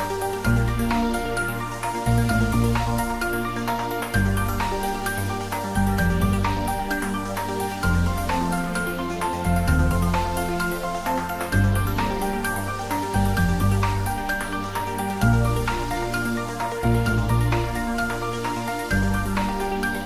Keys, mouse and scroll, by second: 0.2 scroll up 1, 2.8 scroll up 1, 3.0 a, 5.2 shift+right click, 11.6 shift+a, 14.9 click, 17.7 Tab.